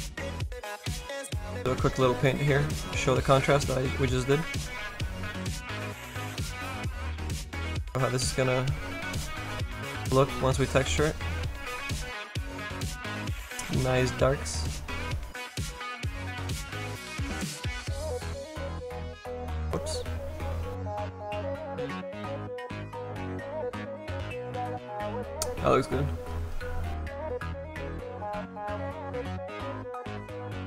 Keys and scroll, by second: 19.6 ctrl+z.